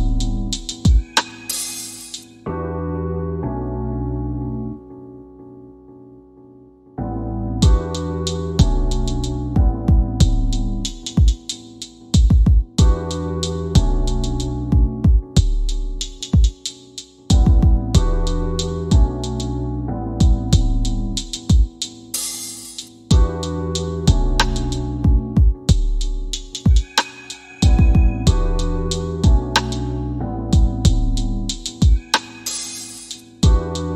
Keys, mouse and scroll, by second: 8.9 click, 12.6-16.5 drag, 21.0-25.2 drag, 30.2 click.